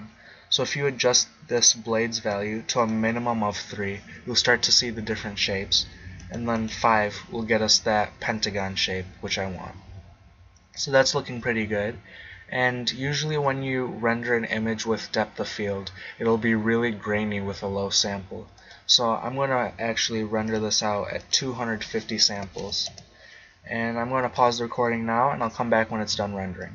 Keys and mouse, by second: 1.6-4.4 drag, 6.2 click, 6.5 click, 6.8-8.3 drag, 8.3 middle click, 18.6-20.3 drag, 20.5-23.2 drag.